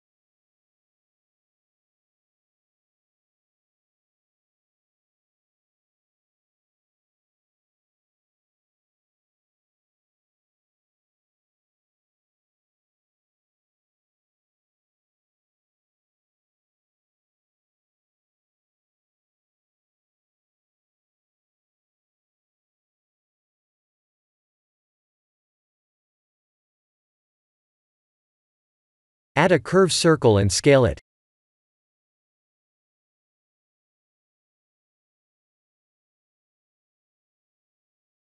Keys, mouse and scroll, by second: 3.1 click, 6.4 click, 9.2 scroll down 1, 11.0-12.9 scroll down 4, 14.7 click, 21.6-22.1 scroll up 2, 21.9 middle click, 23.9 click, 26.5-28.4 scroll down 2, 28.4 Tab, 28.8 click, 29.1 scroll up 4, 29.7 shift+a, 32.6 s, 36.4 middle click.